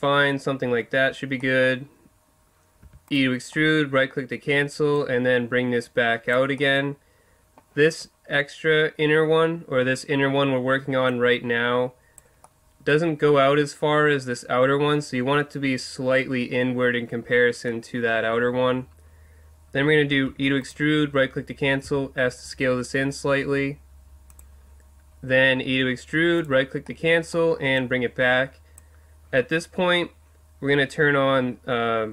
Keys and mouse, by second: 2.8 e, 4.9-6.1 middle drag, 6.1 click, 6.6-10.0 middle drag, 11.1-12.4 drag, 12.4 middle click, 12.6 click, 20.3 e, 20.7 click, 20.7 right click, 21.8 s, 22.4 click, 24.4-26.2 drag, 25.6 e, 26.4-27.8 drag, 27.8 middle click, 28.1-29.6 drag, 28.1 right click.